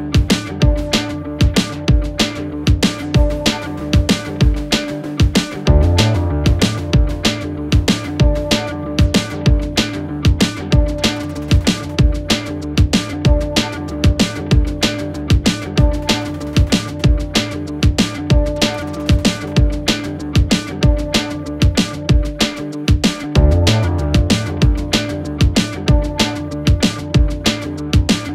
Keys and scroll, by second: 1.3 1, 3.4 4, 4.9 ctrl+z, 7.8 2, 8.7 Delete, 9.5 Delete, 10.3 Delete, 11.2 ], 13.4 Delete, 15.1 f, 18.8 4, 19.2 3.